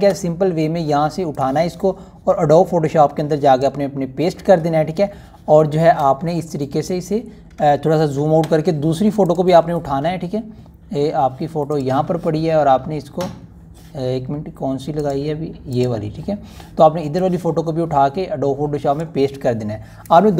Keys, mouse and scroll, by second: 0.5-4.7 drag, 8.3 click, 8.5 ctrl+alt+scroll down 1, 10.1 click, 12.9-19.9 drag.